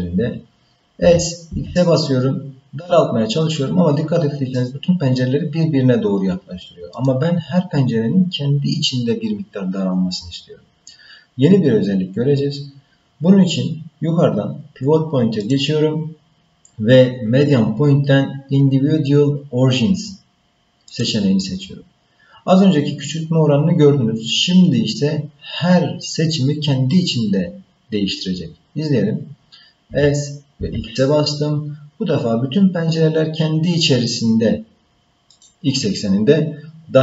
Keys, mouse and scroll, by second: 1.0 s, 15.4-21.7 drag, 29.9 s.